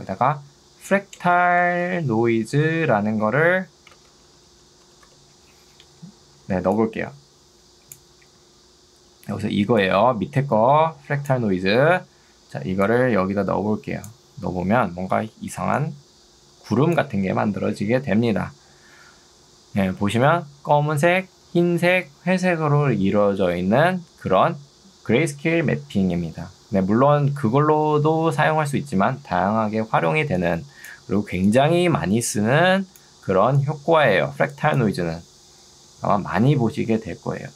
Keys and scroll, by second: 0.3-5.0 typing, 6.5 ctrl+2, 11.9 ctrl+Escape, 15.3 ctrl+2.